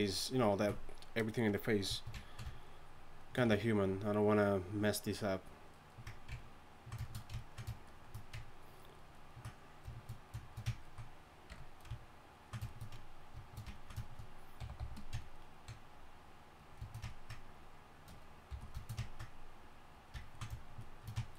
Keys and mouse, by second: 11.5 KP_3, 17.2 f, 18.5 f.